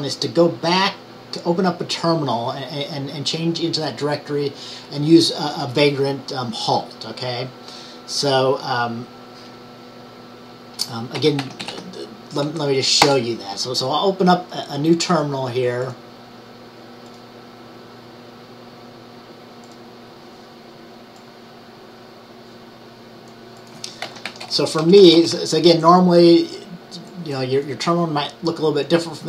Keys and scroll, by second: 11.0-12.3 typing, 23.9-24.8 typing, 27.2-28.0 typing.